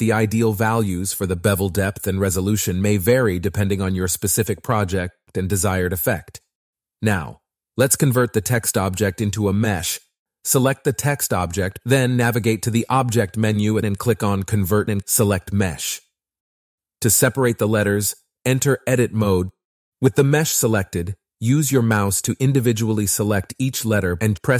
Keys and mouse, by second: 3.2-4.3 drag, 5.4 middle click, 6.1 shift+middle click, 9.5 middle click, 9.7 click, 10.2 Tab, 11.0 Tab, 12.6-13.9 drag, 16.7 click, 17.9 Tab, 19.5 click, 19.9 Tab, 19.9 a, 20.1 l, 20.9 z, 21.8 KP_1, 22.6 shift+click, 23.7 b.